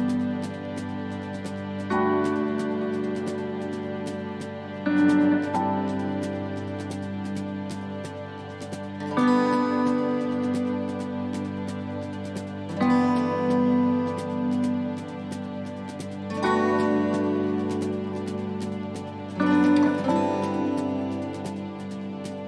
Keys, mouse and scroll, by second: 7.1 shift+middle click, 7.1 scroll down 1, 8.0 middle click, 8.4-8.9 scroll down 2, 9.1 shift+middle click, 9.6-9.9 scroll up 1, 10.0 middle click, 10.6 shift+middle click, 12.4 click, 14.9 right click, 15.8 middle click, 16.3 shift+middle click, 17.9 middle click, 18.9 c.